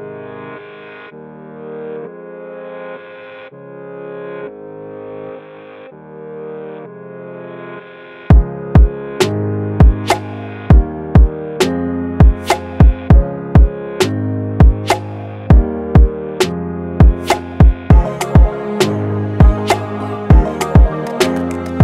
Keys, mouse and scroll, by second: 0.0-0.1 typing, 1.8 click, 4.3-5.3 click, 9.3 click, 10.6 click.